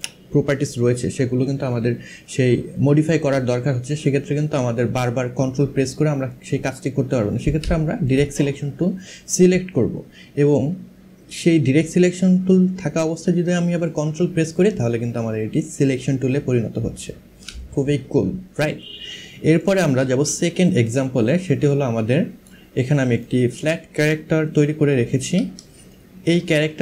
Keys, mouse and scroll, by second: 7.7 click, 20.1 space, 20.5 click, 22.1 space, 22.9 click, 25.3 space, 25.6 click.